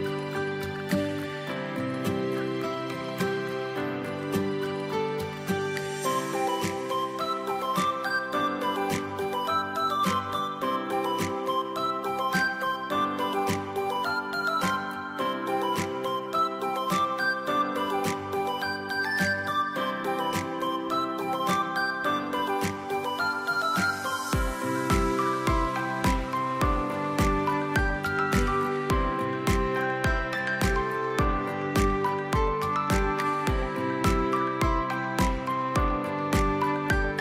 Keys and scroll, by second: 17.3 space, 25.6 space, 28.7 ctrl+x, 29.6 ctrl+b, 32.2 space, 33.2 ctrl+x, 34.2 ctrl+b.